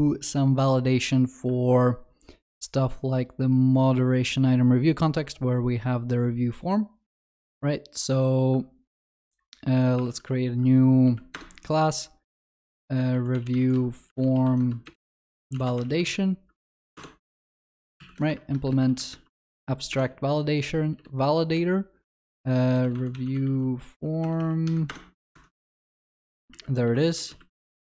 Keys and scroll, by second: 10.1 alt+Insert, 19.9 Return, 24.9 Return, 27.5 Return, 27.6 Tab.